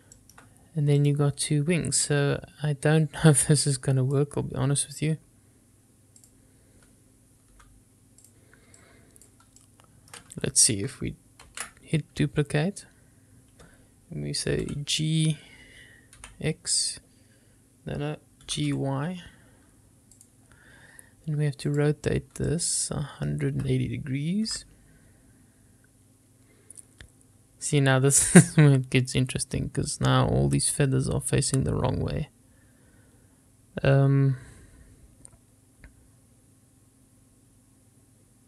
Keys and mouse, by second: 0.5-1.3 shift+middle drag, 1.3 drag, 3.9-4.4 drag, 6.4 click, 7.7 g, 8.5-9.0 drag, 9.1 click, 10.3-10.8 middle drag, 11.8 shift+d, 14.9 g, 16.5 x, 18.7 g, 19.0 y, 21.9 click, 23.2-23.5 shift+middle drag, 24.7 r.